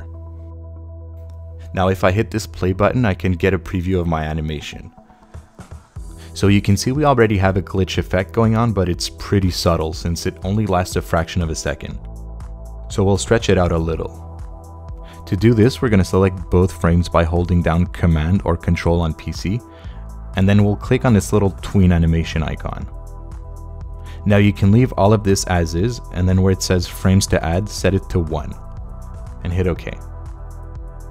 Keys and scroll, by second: 12.9 space.